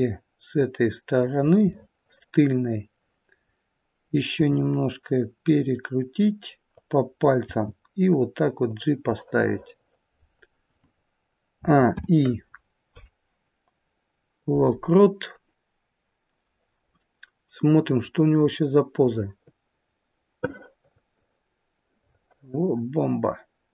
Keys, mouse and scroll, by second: 1.7 middle click, 4.4 r, 7.4 g, 9.3 middle click, 11.5 a, 11.9 i, 17.8 click, 18.4 middle click.